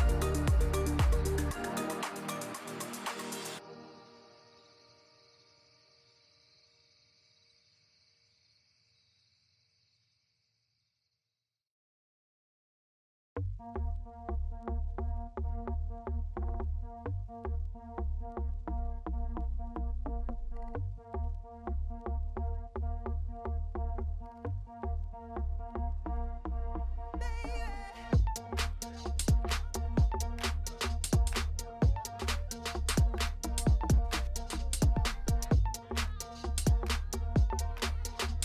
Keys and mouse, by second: 0.3 alt+s, 4.2 Tab, 4.5 drag, 5.1 drag, 5.5 Tab, 5.9 3, 6.4 alt+click, 7.2 alt+s, 9.1 Tab, 9.6 drag, 10.6 click, 11.0 drag, 11.3 shift+drag, 11.7 click, 12.0 shift+drag, 12.1 shift+middle click, 12.4 middle click, 12.7 shift+middle click, 13.8 shift+middle drag, 14.1 click, 14.6 Tab, 15.1 3, 16.3 click, 16.5 l, 17.2 shift+s, 17.8 Tab, 18.6 shift+a, 19.9 Tab, 20.1 s, 21.4 s, 22.7 s, 23.7 KP_1, 24.2 Tab, 24.5 g, 27.0 Tab, 27.7 g, 29.2 click, 30.3 s, 32.2 click, 32.7 click, 33.1 shift+click, 33.6 click, 34.0 click, 34.7 click, 35.3 middle click, 35.7 shift+middle click, 36.2 z, 36.9 2, 38.1 click.